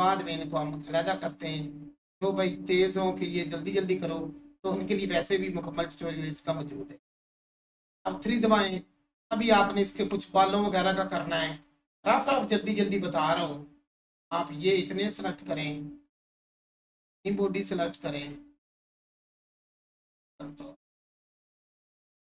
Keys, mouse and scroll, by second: 2.7 click, 3.9-4.4 scroll down 1, 5.0 alt+shift+click, 5.5 scroll down 1, 7.1 click, 7.8 3, 8.3 click, 9.2 Tab, 11.5-14.7 drag, 15.3-20.1 shift+drag, 20.1-22.2 ctrl+drag.